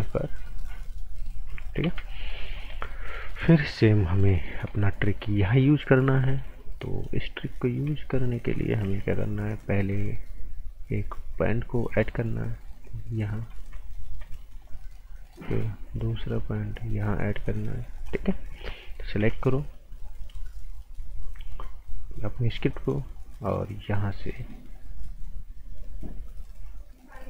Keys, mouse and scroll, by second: 0.2 click, 1.8 ctrl+z, 2.1 scroll down 1, 2.3 right click, 2.5 scroll up 1, 2.7 right click, 3.2-3.7 scroll up 1, 3.8 alt+right click, 6.6 scroll up 1, 6.8 right click, 7.7 scroll down 1, 7.9 right click, 8.8 a, 9.1 scroll up 1, 13.4 click, 13.6-14.1 scroll down 1, 14.3 right click, 14.9 scroll up 1, 15.5 right click, 15.7 scroll up 1, 16.3 right click, 18.0 click, 18.2 scroll down 1, 19.2 a, 19.4-19.8 scroll down 1, 19.8-20.7 scroll up 1, 22.3 click, 22.7 scroll up 1, 23.8 click.